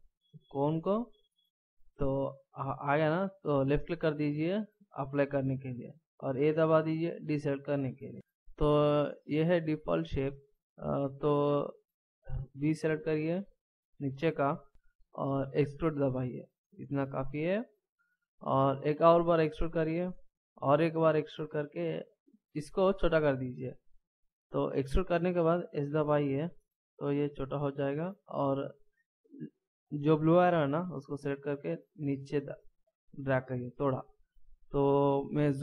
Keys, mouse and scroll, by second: 6.5 a, 12.4 b, 16.1 e, 19.2 e, 20.5 e, 25.9 s, 30.7 click.